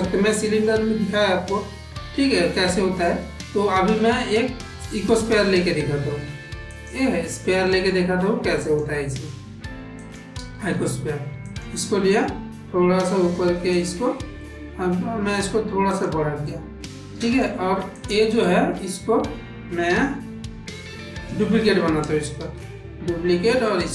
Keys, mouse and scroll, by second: 8.4 click, 9.8 click, 10.4 s, 12.6 g, 14.3 middle click, 14.7 s, 16.3-17.3 middle drag, 17.8 click, 18.3 middle click, 19.7 g, 22.2 shift+d.